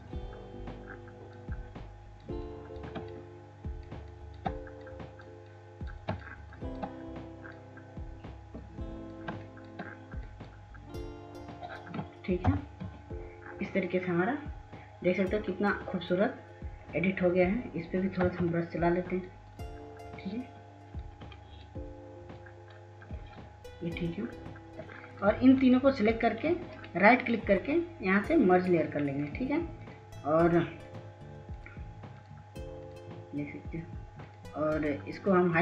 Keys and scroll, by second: 13.3 ctrl+0, 19.1 ], 19.3 ].